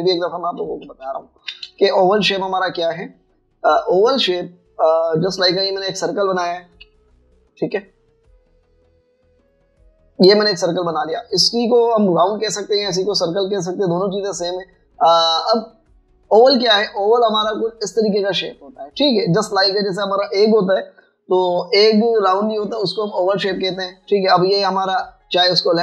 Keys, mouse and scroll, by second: 0.4 ctrl+1, 2.9 space, 3.6 alt+scroll up 1, 3.8 space, 7.8 v, 25.6 v.